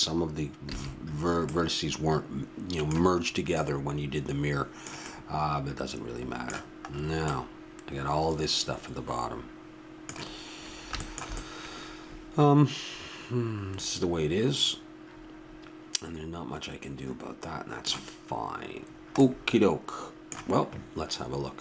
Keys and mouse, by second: 0.7 a, 4.2-5.1 middle drag, 9.7-21.6 middle drag.